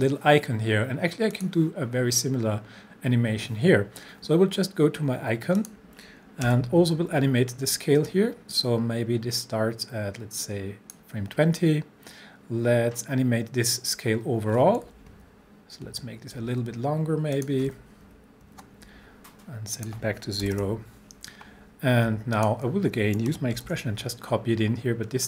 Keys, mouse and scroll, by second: 1.4 click, 5.0 scroll up 1, 5.6 click, 6.5 s, 8.1-11.2 drag, 14.8 click, 15.1 shift+Page_Down, 17.4 click, 18.1 shift+Page_Up, 19.8 click, 20.5 0, 22.4 alt+click, 23.6 ctrl+v, 25.1-25.2 scroll up 1.